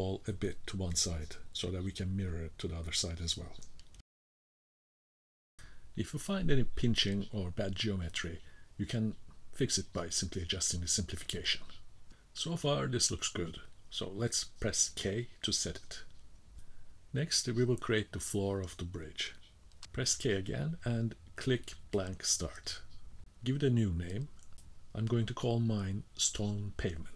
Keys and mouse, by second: 2.0-3.3 drag, 3.6 middle click, 4.6 middle click, 6.1 middle click, 6.8 middle click, 9.7-11.9 drag, 12.1 middle click, 14.9 k, 16.4 click, 16.5-17.0 middle drag, 17.6-18.7 middle drag, 19.9 k, 21.1-27.1 drag.